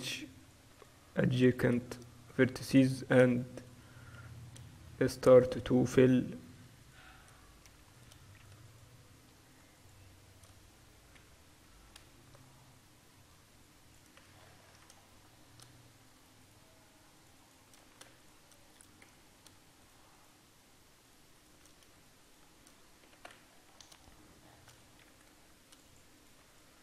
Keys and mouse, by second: 0.5-5.2 right drag, 4.3 f, 5.2 middle click, 5.6-12.1 right drag, 7.7 f, 11.2 f, 12.1 ctrl+r, 16.3 middle click, 16.5-19.2 drag, 19.2 f, 23.2 f, 25.1 ctrl+r, 25.9 click, 26.7-26.8 right drag.